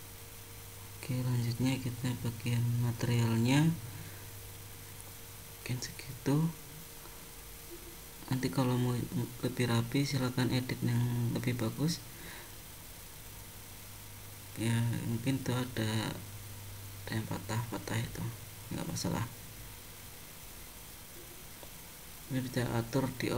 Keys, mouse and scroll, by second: 0.8 click, 3.5 scroll down 1, 6.3 middle click, 8.1 scroll up 2, 9.0 middle click, 11.3 shift+middle click, 12.5 middle click, 13.8 middle click, 17.4-18.1 scroll down 3, 18.1-19.1 scroll up 1, 19.1-20.6 scroll up 2, 21.8 click.